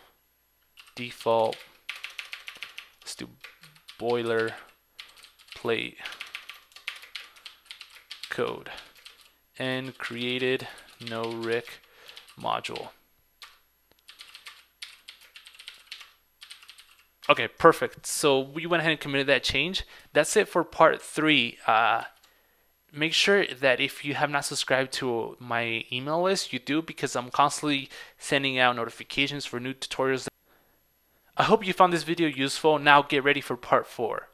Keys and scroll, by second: 20.4 super+Tab.